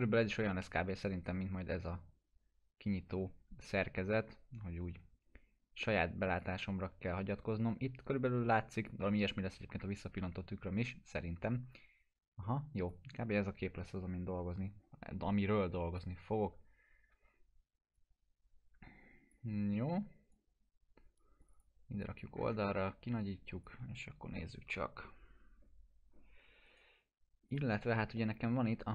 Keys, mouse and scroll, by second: 0.3 Left, 6.3 click, 11.7-13.0 drag, 22.3 scroll up 1, 23.2-23.8 drag, 26.1 scroll down 1, 26.7 right click, 27.5 click, 28.2-28.8 alt+middle click.